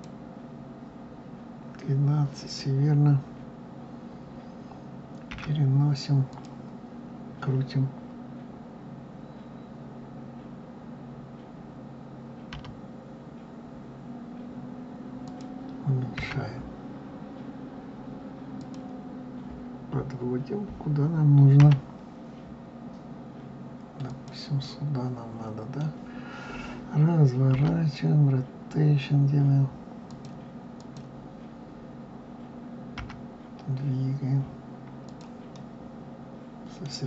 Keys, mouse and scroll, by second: 5.3 g, 12.5 r, 16.1 s, 21.5 g, 24.6-27.5 middle drag, 27.5 r, 30.7 click, 32.9 g, 35.5-37.0 middle drag.